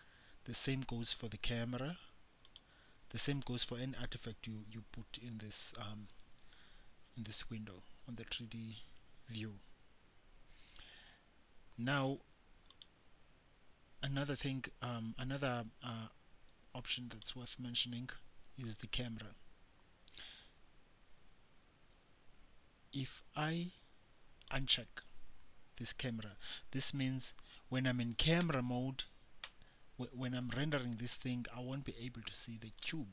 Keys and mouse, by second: 12.9-28.6 drag, 28.6 KP_0, 29.6 KP_0.